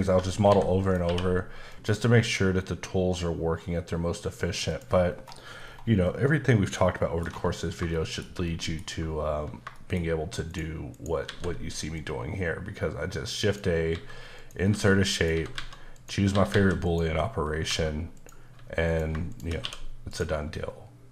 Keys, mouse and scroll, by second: 0.5 h, 0.8 click, 1.0 q, 1.7 click, 4.7 click, 5.1-6.0 scroll down 4, 6.0 middle click, 7.6 scroll down 1, 7.9 shift+middle click, 9.7 shift+middle click, 10.5 shift+right click, 10.9 shift+double right click, 11.3 shift+a, 11.9 click, 13.9-16.5 typing, 14.3 click, 15.1 click, 15.9 click, 16.8 click, 17.4 scroll up 2, 17.7 s, 18.2 click, 18.5 s, 18.8 click, 19.3 shift+click, 19.5 click, 19.6 q, 20.1 click, 20.5 middle click.